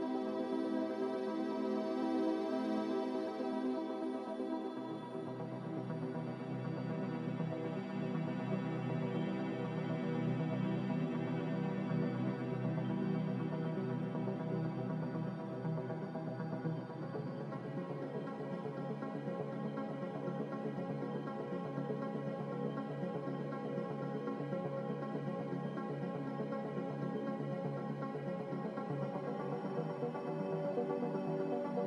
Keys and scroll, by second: 0.4 Return, 0.4 4, 7.7 z, 15.8 g, 18.1 `, 18.5 Escape, 22.6 z, 30.6 a.